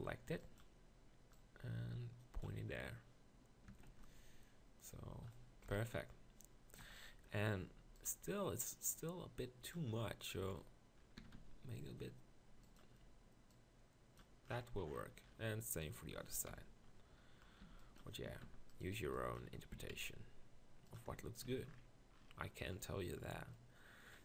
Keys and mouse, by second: 0.1 b, 3.7 Tab, 3.9 z, 5.7 KP_1, 6.0 Tab, 6.8 KP_Decimal, 9.7 KP_Decimal, 10.4 z, 11.2 s, 15.2 middle click, 16.5 ctrl+KP_Decimal, 17.6 b, 18.3 s, 19.0 b, 19.7 s, 21.1 Tab, 21.6 z.